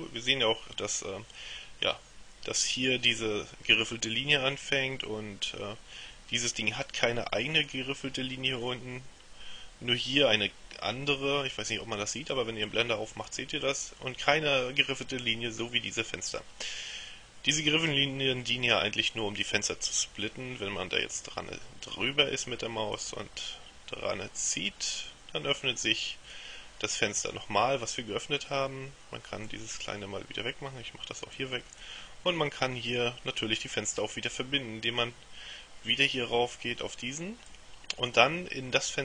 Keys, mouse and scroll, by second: 23.1-26.9 drag, 29.6 click, 31.5 click, 37.6-39.0 drag.